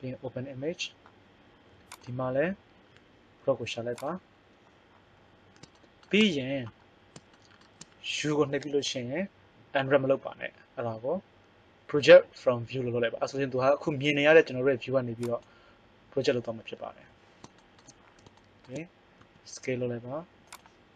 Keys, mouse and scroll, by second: 1.3 click, 1.9-4.0 drag, 8.6 u, 17.0 middle click, 17.6 middle click, 19.2 s.